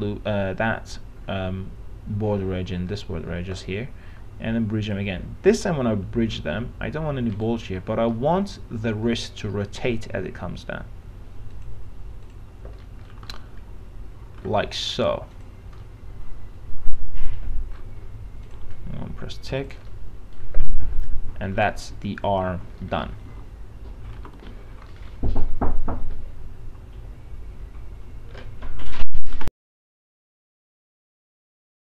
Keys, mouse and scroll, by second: 6.3 alt+middle click, 7.5 right click, 8.4-9.4 alt+middle drag, 11.7 click, 13.1 middle click, 13.3 scroll down 1, 13.5-14.6 alt+middle drag, 15.6 click, 16.1-18.4 alt+middle drag, 18.7 click, 20.0 middle click, 20.5 scroll down 1, 20.9 alt+middle click, 22.2 alt+f, 22.7 alt+z, 23.6-24.3 alt+scroll down 1, 24.3 alt+x, 25.1 middle click, 26.2-27.4 scroll up 1.